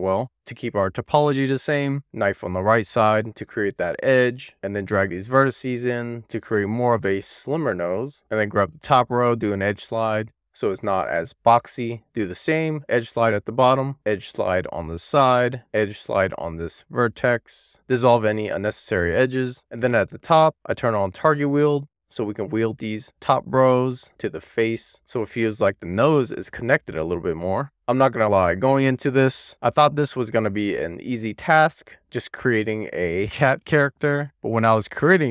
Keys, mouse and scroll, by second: 4.3 middle click, 4.5 scroll up 6, 5.1 super+z, 5.2 click, 5.8 click, 6.3 click, 7.4 click, 7.6 click, 7.9 click, 8.0 middle click, 8.1-8.5 scroll down 1, 8.5 click, 8.8 g, 11.0 middle click, 11.1 shift+middle click, 11.9 click, 12.4 middle click, 12.5 middle click, 12.9 g, 13.5 middle click, 13.9 middle click, 14.1 click, 15.4 0, 15.5 middle click, 15.7 click, 15.8 middle click, 16.2 click, 17.2 middle click, 17.6 2, 17.8 click, 18.4 x, 19.5 Tab, 19.9 alt+q, 20.5 Tab, 21.5 click, 22.5 click, 23.6 middle click, 24.0 click, 25.1 middle click, 26.1 scroll down 1, 26.4 middle click, 27.7 shift+middle click, 28.2 scroll up 1, 28.3 middle click, 28.8-29.9 middle drag, 30.5 middle click, 31.2 Tab, 31.3 alt+q, 31.5 Tab, 31.8 click, 32.1 ctrl+click, 32.7 ctrl+click, 33.0 middle click, 33.6 ctrl+click, 33.7 right click, 34.3 middle click.